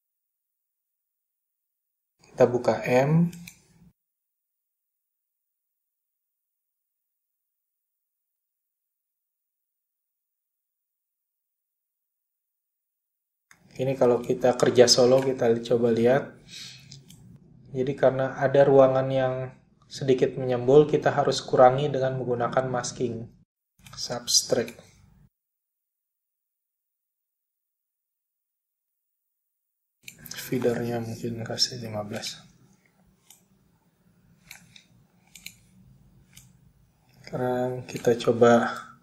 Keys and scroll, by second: 0.8 m, 20.5 space, 22.7 typing, 31.9-32.6 typing, 34.0-34.7 typing.